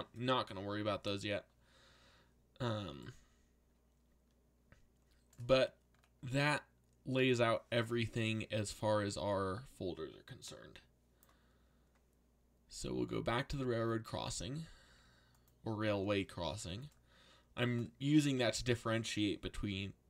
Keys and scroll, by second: 14.8 z, 15.8 z, 19.7 s.